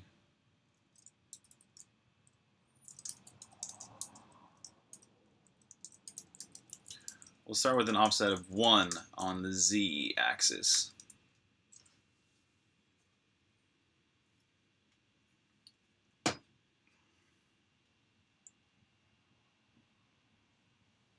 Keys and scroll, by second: 0.4-5.9 typing, 10.5-12.1 typing.